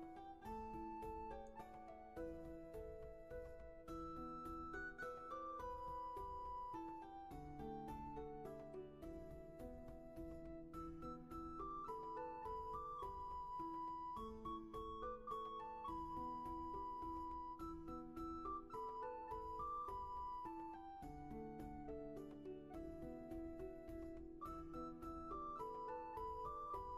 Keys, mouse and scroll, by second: 5.8 ctrl+z, 8.0 ctrl+z, 16.9 ctrl+z, 22.3 ctrl+z, 24.3 ctrl+z.